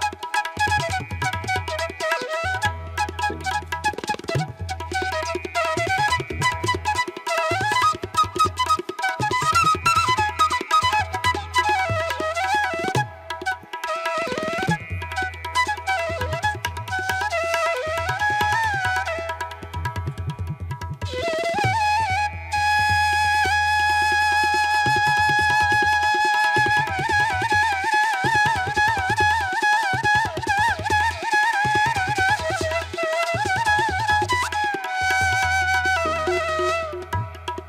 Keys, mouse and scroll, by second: 1.6 ctrl+alt+z, 2.4 ctrl+=, 2.6 space, 2.8 ctrl+=, 10.2 space, 10.7 ctrl+alt+z, 12.4 ctrl+alt+z, 13.4 space, 14.9 space, 16.5 space, 17.2 ctrl+=, 18.7 ctrl+alt+z, 20.0 space, 20.3 ctrl+-, 20.4 ], 20.5 ctrl+-, 20.6 space, 20.8 ctrl+-, 20.9 ], 23.1 space, 23.3 ], 25.1 space, 25.3 ], 25.5 ctrl+alt+z, 26.4 space, 26.6 ], 28.3 typing, 34.4 space, 36.5 space, 37.2 ctrl+alt+z, 37.4 ctrl+=.